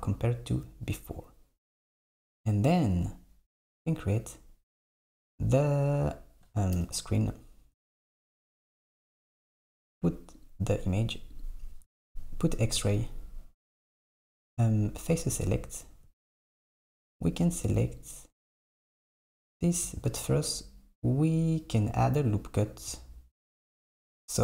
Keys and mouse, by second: 2.1 Tab, 6.8 KP_7, 10.4 click, 11.4 click, 17.7 click.